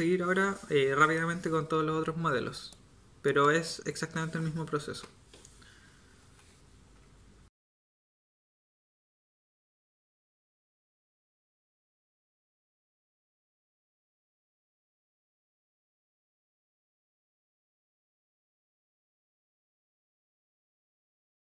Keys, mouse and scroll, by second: 4.9 KP_7, 7.6 a, 7.8 Tab, 7.8 Tab, 8.8 g, 9.4 Tab, 10.0-11.8 typing, 12.9-16.7 typing, 13.5 click, 13.9 click, 17.8-21.4 typing, 20.3 Tab, 20.4 Tab.